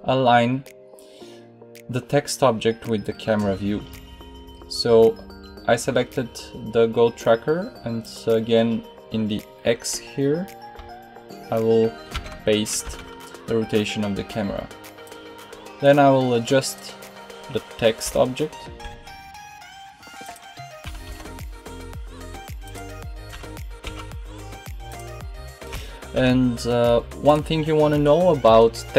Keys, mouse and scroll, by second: 3.4-7.9 middle drag, 17.9 g, 20.8 g, 23.2 g, 25.6 g.